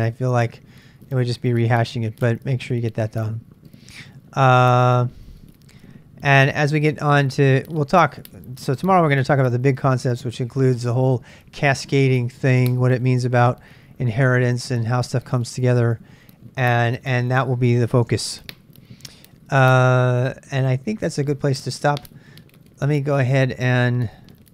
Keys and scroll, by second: 18.1 super+Tab, 19.6 super+Tab.